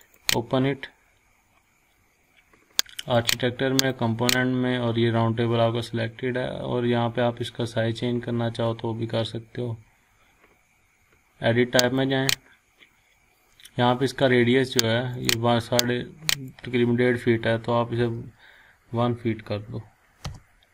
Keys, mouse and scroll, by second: 3.0 click, 11.8 click, 15.1-16.7 drag, 18.0 1, 20.2 Return.